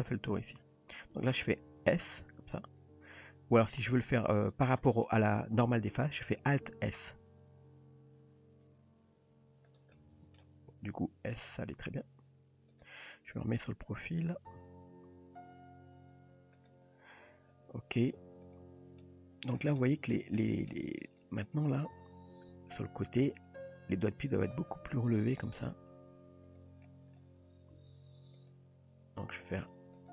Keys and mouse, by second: 2.1 s, 7.0 alt+s, 10.0 middle click, 10.8 s, 13.3 KP_1, 14.5 KP_3, 15.5 g, 18.5 click, 19.0-19.5 middle drag, 19.8-20.1 middle drag, 20.4-20.7 middle drag, 21.1 click, 22.5 KP_3, 23.9 r, 24.9 g, 25.8 r, 27.7 s, 29.3 r.